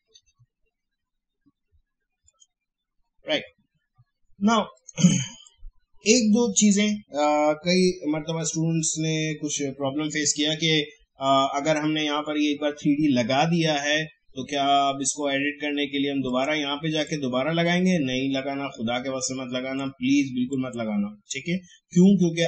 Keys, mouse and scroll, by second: 0.0-0.8 typing, 2.3 click, 4.7-8.7 drag, 16.2-20.5 drag.